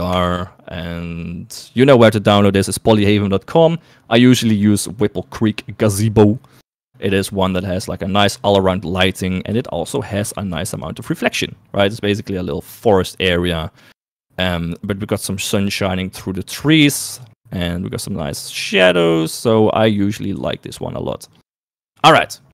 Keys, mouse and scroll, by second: 9.7 shift+middle click, 10.6 shift+middle click, 11.6-15.1 middle drag, 16.2 middle click, 17.5 shift+middle click, 20.5 KP_3, 22.3 shift+middle click.